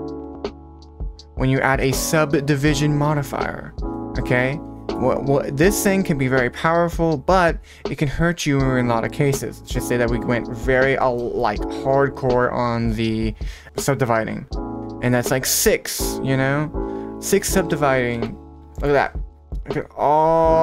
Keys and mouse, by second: 0.6-1.9 drag, 6.2 click, 9.2 click, 9.5 click, 9.8 click, 9.9 click, 10.0 click, 10.2 click, 11.2 middle click, 17.2 click, 18.1 Tab, 18.7 middle click, 19.5-20.6 middle drag.